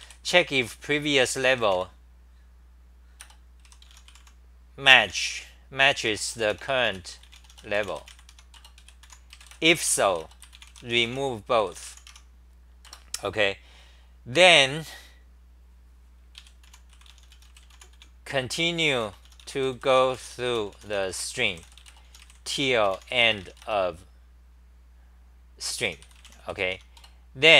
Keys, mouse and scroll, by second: 0.0 ., 0.6 u, 8.3 Home, 8.5 Return, 8.8 ;, 9.0 u, 12.1 Home, 12.8 Return, 16.3 ;, 16.6 u, 27.0 Return.